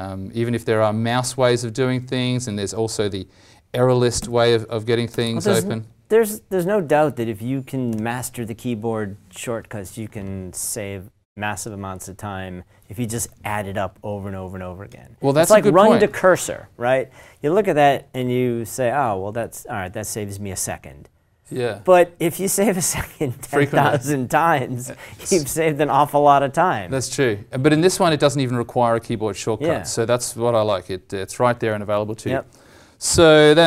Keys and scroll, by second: 4.2 ctrl+alt+e, 5.0 ctrl+\.